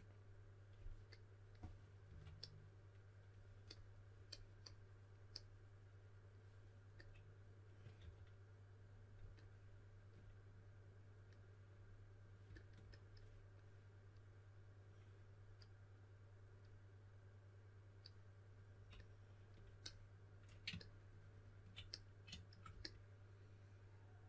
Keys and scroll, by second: 2.0 5, 7.7-8.4 typing.